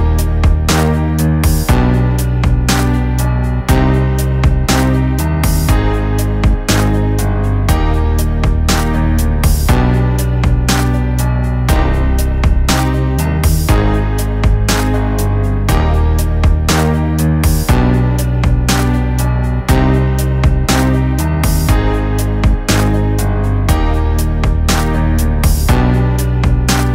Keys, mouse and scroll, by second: 0.8 click, 3.8-4.6 drag, 8.2 click, 11.5-13.1 drag, 18.0 click, 22.3 click, 25.0 click.